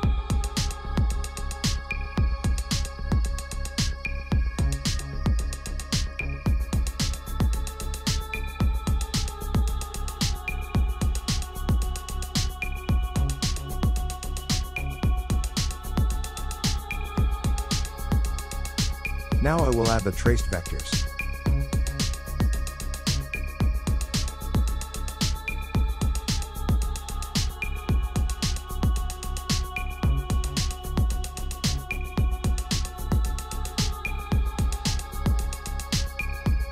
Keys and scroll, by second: 11.9 ctrl+-, 15.9 ctrl+z, 17.3 ctrl+z, 17.7 typing, 18.8 ctrl+v, 36.4 ctrl+z.